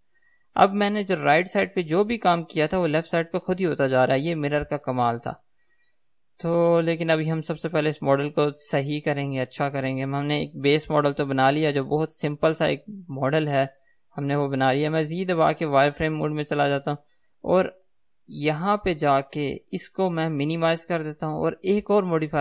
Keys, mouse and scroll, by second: 0.0 click, 0.8-22.4 middle drag, 12.8 KP_3, 16.4 z.